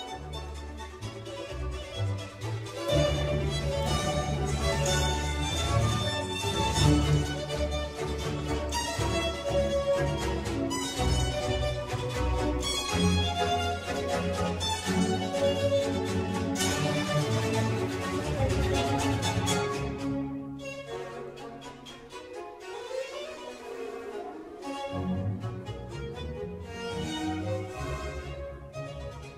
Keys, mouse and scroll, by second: 0.5 click, 1.2-1.8 scroll up 1, 1.8 click, 2.4 g, 8.7 click, 9.6 click, 9.9 Tab, 10.9 click, 11.9 alt+click, 12.6 s, 14.8-15.1 scroll down 1, 15.1 Tab, 15.6-15.9 scroll down 1, 15.9 click, 16.2-16.6 scroll down 3, 16.6-17.4 middle drag, 17.4-17.7 scroll up 2, 17.7-19.2 middle drag, 19.2-19.7 scroll down 1, 19.7-20.1 middle drag, 20.1 click, 20.5 drag, 21.2 click, 23.2-24.7 drag, 25.7 click, 26.6 ctrl+r, 27.2 Tab, 27.9 ctrl+r.